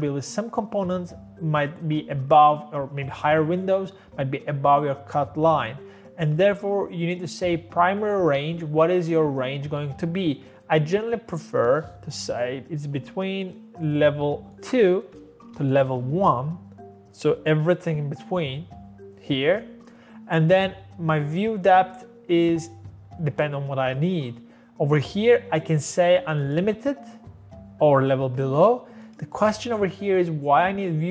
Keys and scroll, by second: 13.1 0.